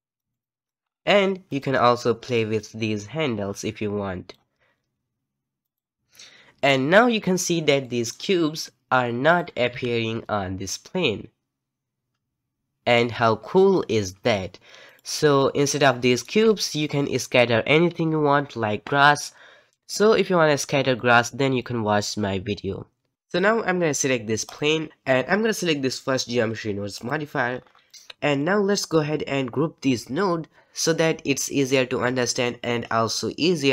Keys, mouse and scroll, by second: 0.0 middle click, 0.8-1.5 scroll up 4, 1.5 click, 2.3-5.2 drag, 5.6 click, 7.8-9.3 middle drag, 9.3 click, 9.7 g, 15.4-19.7 middle drag, 21.0-23.1 middle drag, 24.4 click, 26.9 click, 27.4-28.3 scroll down 10, 27.8 middle click, 28.3-30.5 middle drag.